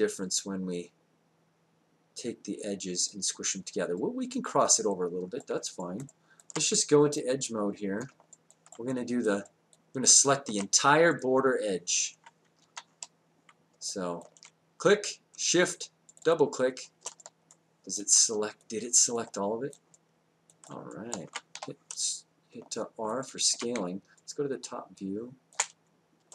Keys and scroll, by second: 12.6 w, 21.5 r, 23.8 space.